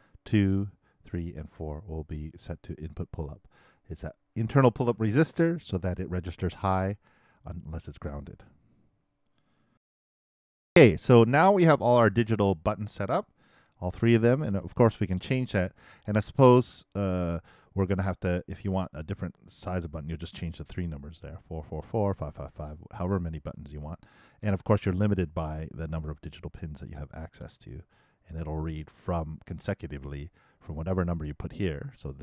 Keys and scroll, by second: 6.2 shift+BackSpace, 9.7 alt+shift+i.